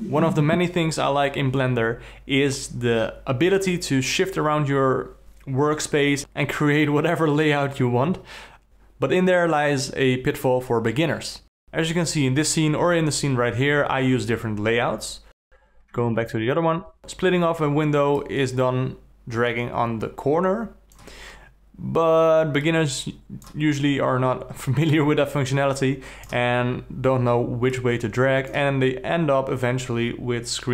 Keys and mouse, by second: 18.4-19.5 drag, 19.7 click, 20.5 click.